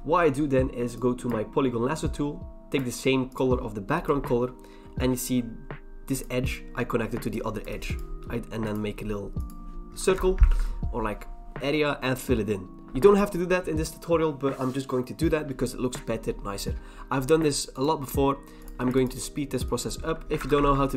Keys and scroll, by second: 10.1 alt+BackSpace, 10.5 ctrl+d, 20.4 alt+BackSpace, 20.6 ctrl+d.